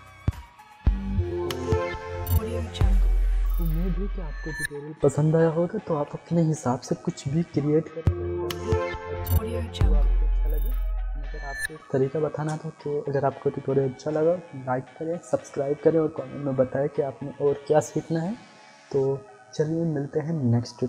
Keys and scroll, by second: 12.3 space.